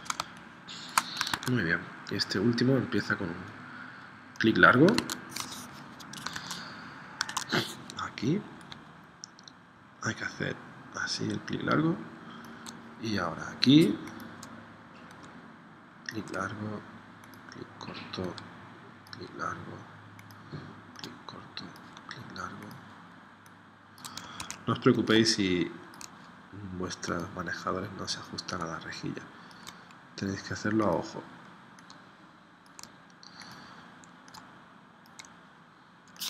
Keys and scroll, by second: 0.3 space, 1.3 super+Tab, 4.9 super+Tab, 6.4 super+Tab, 7.3 super+Tab, 24.4 super+z.